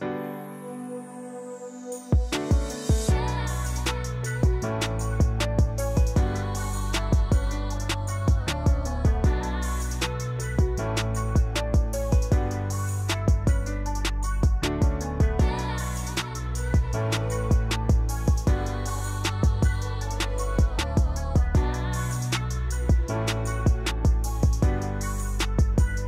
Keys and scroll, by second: 5.0 v, 5.4 v, 15.9-17.5 typing, 23.2-24.7 typing.